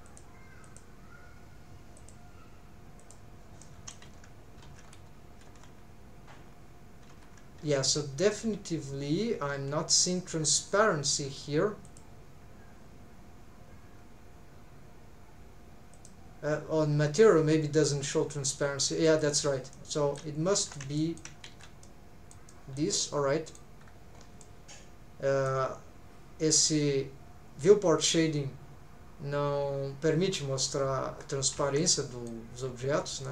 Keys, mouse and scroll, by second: 0.1 click, 0.9 click, 2.0 click, 3.0 click, 3.6 middle click, 4.1 alt+z, 4.6 alt+z, 4.8-5.2 scroll up 3, 5.5 alt+z, 7.1 alt+z, 7.7 alt+z, 8.0 scroll down 2, 8.3-10.1 middle drag, 11.8-16.0 drag, 19.1 click, 19.7 middle click, 20.5 alt+z, 21.0 shift+middle click, 21.5 alt+z, 21.8 middle click, 22.5 middle click, 23.0 middle click, 23.8 scroll down 2, 24.1 scroll up 2, 24.4-25.5 middle drag, 31.2 scroll down 1, 31.5 alt+z, 31.8 middle click, 32.6 scroll up 1, 33.2 middle click.